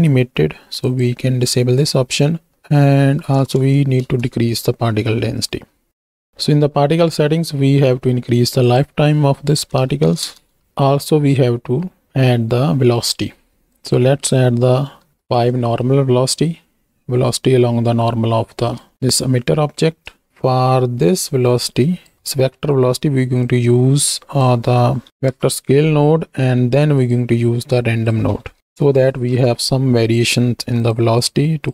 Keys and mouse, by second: 0.8 click, 2.5-4.1 drag, 3.6 KP_0, 5.9 ctrl+z, 6.3 click, 7.2 click, 8.0 click, 8.6-10.4 drag, 10.7 shift+Right, 10.7 shift+Left, 10.7 space, 11.1 space, 11.8 click, 13.7-15.1 drag, 15.1 shift+Right, 15.2 shift+Left, 16.5 space, 18.6 space, 18.9-19.9 shift+drag, 21.5-22.6 drag, 22.3 middle click, 23.4-25.3 drag, 27.0 drag, 27.8-29.4 drag, 30.8 drag, 31.2 click.